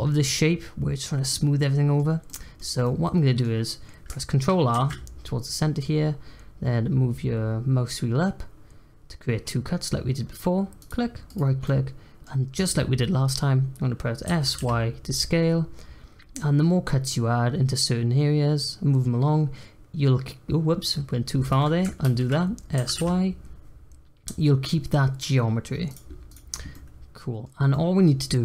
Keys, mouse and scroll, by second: 4.7 ctrl+r, 11.6-14.2 middle drag, 14.2 s, 22.0 ctrl+z, 22.7 s, 26.2 click, 26.7-28.4 middle drag.